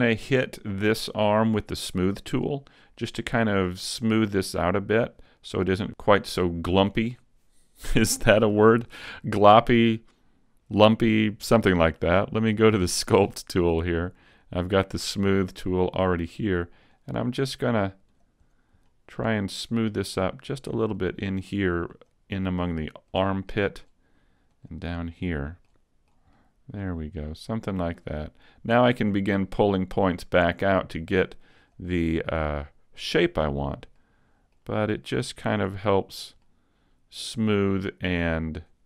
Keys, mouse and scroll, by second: 12.5 click, 13.0 click, 15.6 scroll up 2, 17.0 click, 18.1 click, 18.9 middle click, 19.6 click, 19.9 middle click, 20.6 click, 21.0 click, 21.6 click, 22.0 click, 22.5 middle click, 23.2 click, 23.6 middle click, 24.6 click, 25.0 middle click, 25.4 middle click, 26.1 click, 26.1 middle click, 26.4 middle click, 27.2 click, 27.8 click, 28.3 middle click, 29.2-29.6 scroll down 2, 29.6 middle click, 30.6 click, 31.0 middle click, 31.6 click, 32.0 middle click, 33.6 click, 34.0 middle click, 35.0 click, 35.4 middle click, 36.2 click, 36.5 middle click.